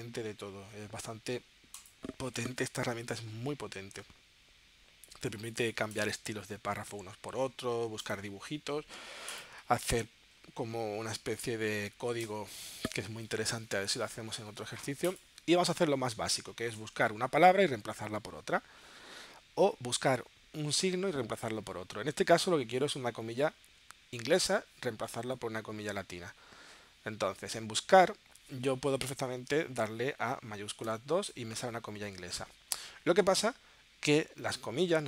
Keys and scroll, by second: 30.8 shift+2.